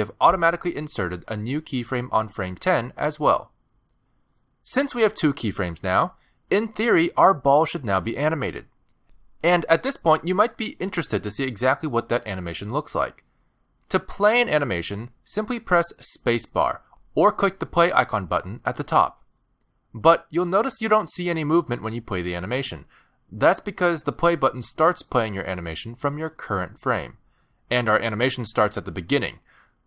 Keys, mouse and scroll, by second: 0.0 shift+middle click, 16.5 space, 18.4 click, 19.4 click.